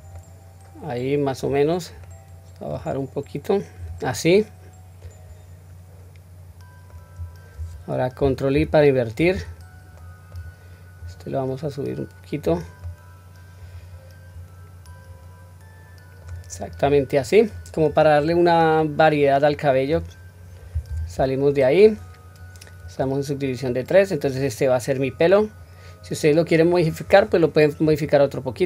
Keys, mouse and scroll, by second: 0.1-1.4 middle drag, 1.6-2.0 scroll down 1, 2.0 middle click, 2.3-3.7 drag, 2.3 scroll up 1, 4.1-6.9 middle drag, 7.1-8.1 scroll up 1, 8.5 ctrl+i, 9.9 middle click, 10.9 click, 11.2-12.4 drag, 12.8-16.2 middle drag, 16.6 click, 17.1 middle click, 17.7-18.8 scroll down 2, 18.1-19.8 middle drag, 20.8 Tab, 21.3-21.8 middle drag, 22.9-26.7 middle drag, 27.2-28.6 middle drag.